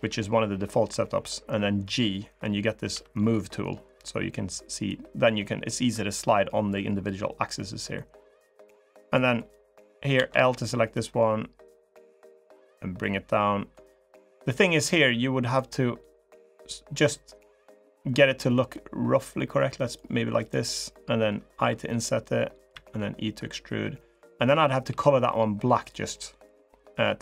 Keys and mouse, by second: 4.6-6.5 drag, 7.8-9.3 drag, 9.9 l, 10.7-12.6 drag, 12.8 click, 15.2 click, 16.0 click, 17.6-19.7 drag, 20.1 click, 24.6 g, 26.3 click, 27.0 middle click.